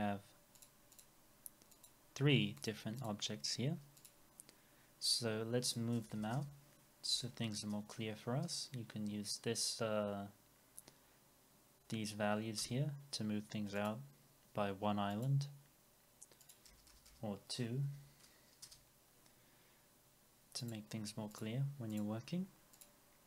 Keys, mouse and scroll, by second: 0.9 double click, 6.0 BackSpace, 12.6 Return, 13.8 double click, 16.7 BackSpace, 17.8 BackSpace, 18.6 Return.